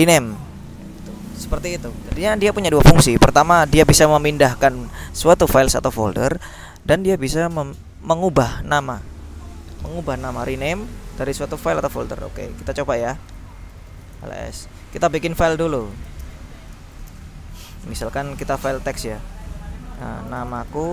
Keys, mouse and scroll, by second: 1.0 click, 1.8 alt+Tab, 12.3 q, 13.8 ctrl+l, 14.1 ctrl+s, 14.2 ctrl+Return, 15.6-17.2 typing, 20.2-20.9 typing.